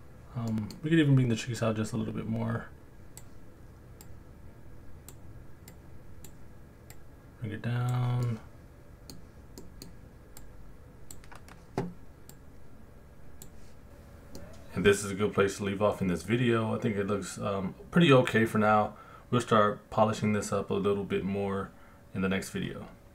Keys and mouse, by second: 0.5 middle click, 1.6 click, 4.1 click, 5.7 click, 6.9 click, 8.3 middle click, 9.6 middle click, 10.4 click, 12.3 click, 14.4-15.6 middle drag, 17.6 middle click, 18.9 middle click.